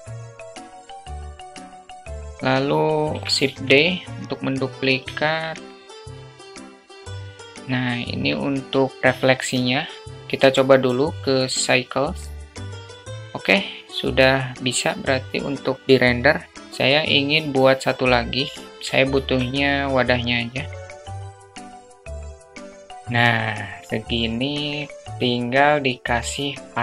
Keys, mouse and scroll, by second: 0.1 alt+middle drag, 0.4 alt+middle click, 0.5 click, 0.8 alt+middle drag, 1.2 click, 1.4 alt+middle click, 1.6 middle click, 1.8 alt+middle drag, 2.2 KP_0, 4.2 shift+d, 5.8 middle drag, 6.1 click, 6.3 alt+middle click, 6.6 click, 6.9 alt+middle drag, 7.1 click, 7.4 KP_0, 10.4 click, 11.9-12.8 drag, 14.7-15.7 drag, 16.4 click, 16.7 alt+shift+middle click, 20.1 shift+d, 21.0 ctrl+z, 21.1 click, 21.2 alt+middle click, 21.4 click, 21.5 alt+middle click, 21.5 ctrl+click, 21.6 ctrl+z, 21.7 alt+middle drag, 21.7 alt+shift+middle click, 21.9 drag, 22.0 alt+middle click, 22.0 click, 22.2 click, 22.6 click, 22.8 click, 22.8 KP_0, 23.6 click.